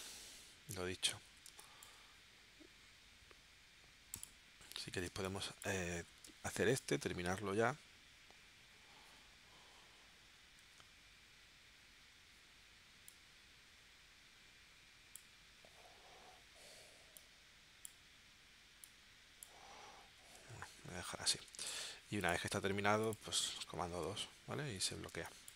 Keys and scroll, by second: 1.6 space, 5.1 space, 6.2 space, 10.6 shift+w, 20.7 super+z, 21.5 v, 23.9 super+2, 25.1 space.